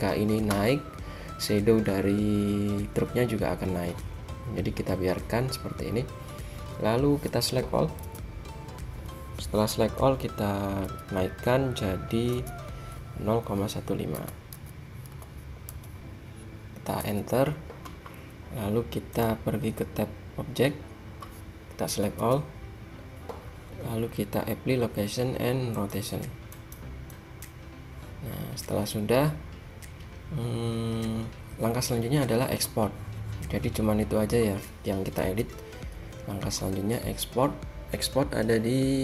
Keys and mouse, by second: 6.0-7.2 middle drag, 8.2 a, 11.0 g, 19.3-22.0 drag, 22.0 a, 22.3 a, 25.5 click, 26.2-32.5 drag, 35.4 a.